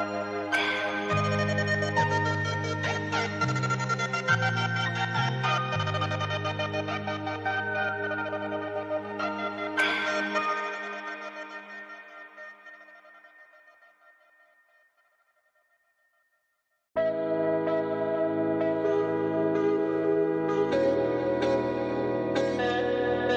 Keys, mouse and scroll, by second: 0.9-3.9 typing, 5.0-12.5 typing, 14.2 click, 16.1 click, 17.1 scroll down 1, 20.6 scroll up 1, 22.7-23.3 scroll up 1.